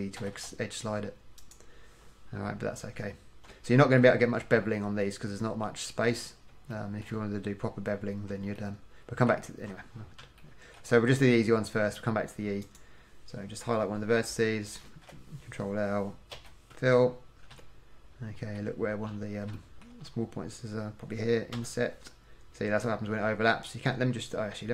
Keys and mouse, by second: 0.3 g, 2.7 middle click, 7.0 click, 15.0 ctrl+l, 16.5 f, 21.7 i.